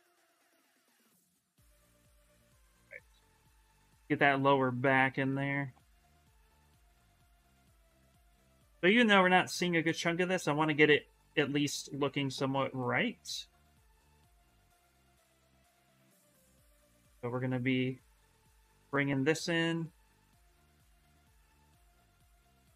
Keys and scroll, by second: 6.3 ctrl+z.